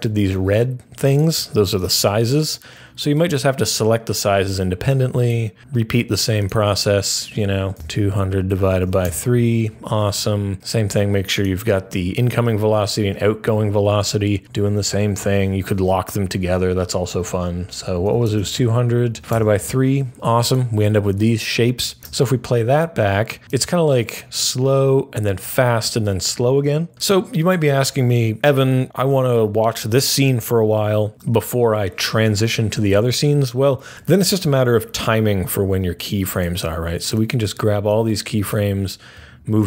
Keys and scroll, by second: 7.7-9.2 typing, 17.7-19.7 typing, 21.1 F3, 21.7-22.5 typing.